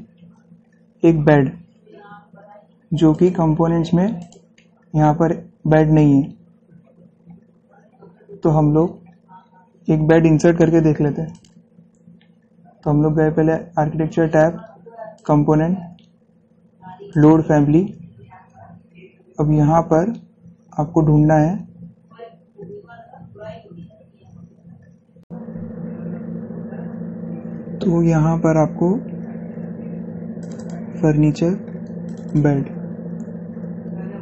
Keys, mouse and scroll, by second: 1.3 scroll down 1, 3.4 click, 5.2-6.1 scroll down 1, 6.4-7.3 scroll, 8.1-8.8 scroll up 1, 8.9-11.4 scroll, 11.4 scroll down 1, 11.5 click, 14.5 click, 18.0 click, 20.6 scroll down 1, 24.7 scroll up 1, 31.1 click.